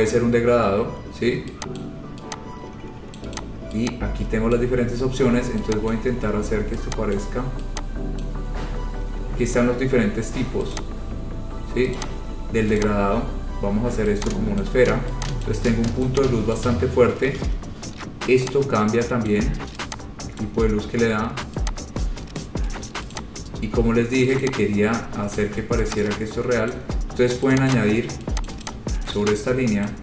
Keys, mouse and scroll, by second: 2.1 click, 3.4 click, 3.6 click, 4.8 click, 6.1 click, 7.3 click, 8.4 click, 10.9 click, 12.1 click, 13.0 click, 14.8 click, 15.7 click, 16.8 click, 17.6 ctrl+z, 19.5 click, 20.6 click, 22.6 click, 23.3 click, 23.8-24.4 scroll, 24.6 click, 26.1 scroll down 4, 26.9 click, 27.7 click, 27.9 click, 28.7 click, 28.9 click, 28.9 scroll.